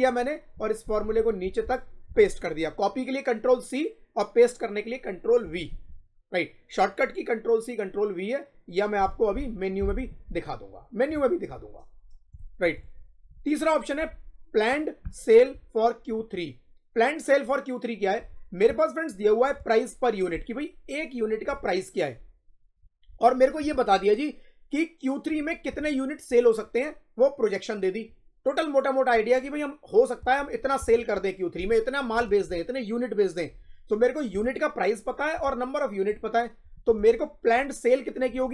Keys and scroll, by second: 2.0 ctrl+v, 5.3 Up.